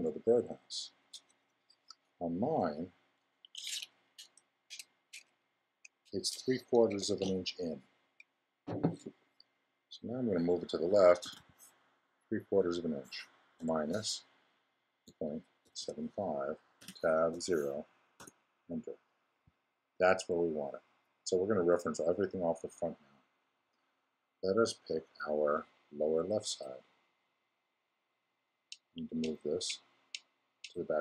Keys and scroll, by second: 11.2 super+m, 13.5 -, 15.0 ..